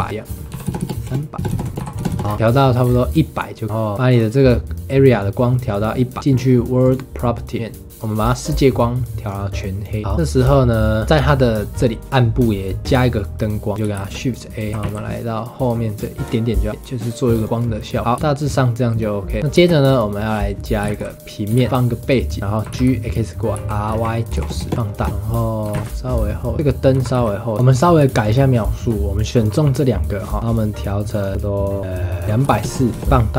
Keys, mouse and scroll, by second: 0.0 KP_0, 0.1 click, 0.8 KP_0, 1.3 click, 1.5 KP_0, 1.8 click, 2.1 KP_0, 2.2 scroll up 4, 2.8-3.7 scroll down 4, 4.1 click, 6.8 click, 8.3 click, 10.0 scroll up 3, 10.1-10.9 scroll down 4, 11.0-12.4 middle drag, 12.8-13.9 middle drag, 13.9 shift+a, 14.7 g, 16.7 click, 17.4 click, 18.2 space, 19.5 space, 19.8 click, 20.8 shift+a, 21.5 shift+a, 22.4 middle click, 22.6 g, 23.6 r, 24.7 s, 25.1-25.6 scroll down 4, 25.6 g, 26.5 click, 26.9 g, 27.6 ctrl+s, 28.2 shift+click, 30.3 middle click, 31.1 click, 33.1 middle click.